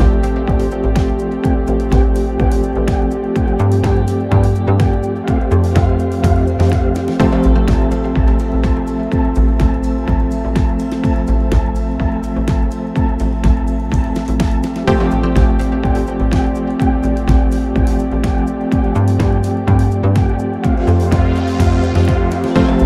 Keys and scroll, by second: 9.0 Delete, 13.9 ctrl+d, 14.0 Escape, 14.6 ,.